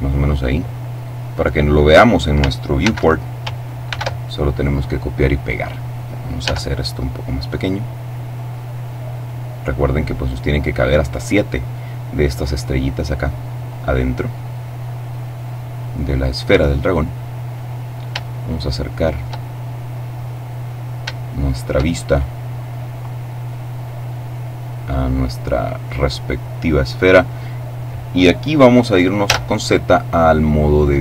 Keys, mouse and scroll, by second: 1.2 click, 2.7 ctrl+c, 3.7 v, 6.3 s, 9.1 click, 10.3 middle click, 10.9-11.5 scroll up 2, 11.5 click, 12.3-14.0 drag, 14.1-16.1 drag, 16.9-17.7 scroll up 2, 18.2-20.2 shift+middle drag, 20.2-20.8 scroll up 1, 20.8 shift+scroll up 1, 20.9 shift+middle click, 21.8-23.3 shift+scroll up 1, 23.9-24.9 scroll up 1, 29.0 z, 30.2-31.0 middle drag.